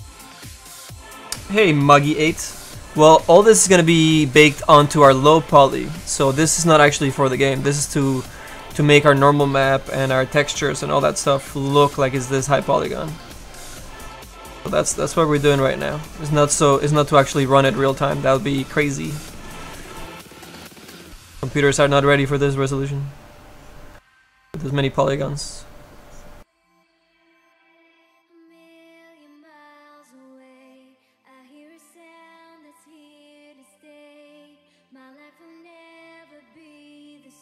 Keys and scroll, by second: 10.2 s.